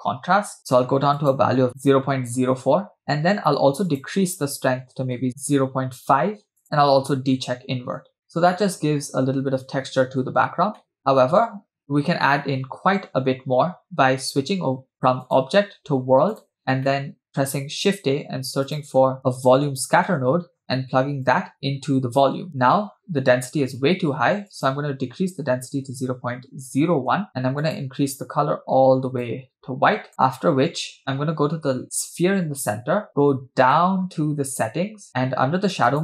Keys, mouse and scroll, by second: 1.7 click, 3.0 scroll down 2, 3.9-5.3 drag, 6.6 click, 8.1 scroll up 2, 8.6-9.0 shift+middle drag, 10.2-10.8 scroll down 2, 11.0-12.1 shift+middle drag, 12.1-13.3 scroll down 1, 15.2-16.4 drag, 16.9 middle click, 17.8 shift+a, 21.3-22.5 drag, 24.5-27.3 drag, 27.6 click, 31.8 click, 33.2-35.8 scroll down 10, 35.9-36.0 drag.